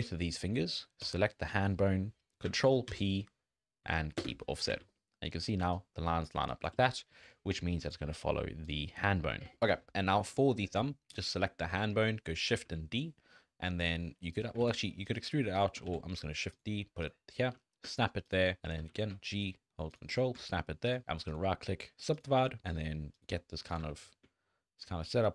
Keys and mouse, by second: 2.9 ctrl+p, 4.7 alt+a, 5.6-6.7 typing, 5.7 click, 6.5 click, 9.0 n, 10.1 click, 10.3 shift+click, 11.1 click, 12.5 shift+d, 14.6 ctrl+z, 15.1 click, 15.9 shift+d, 17.4 g, 18.8 g, 20.9 click, 21.3 click, 22.1 click, 22.4 g, 23.8 g, 25.2 click.